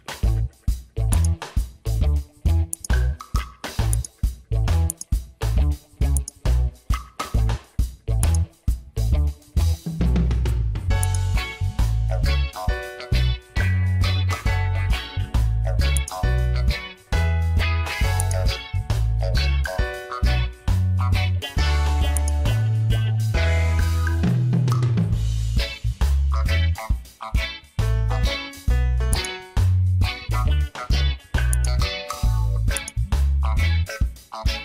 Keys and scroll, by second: 26.4 ctrl+d.